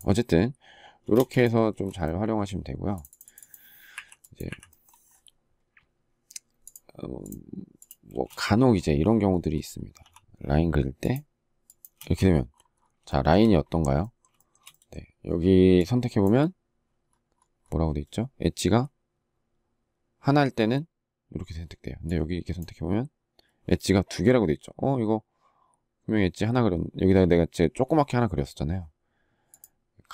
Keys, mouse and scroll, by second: 0.9 space, 3.7 Delete, 7.9 space, 11.8 space, 12.8 shift+middle click, 14.1 shift+middle click, 14.3 shift+double middle click.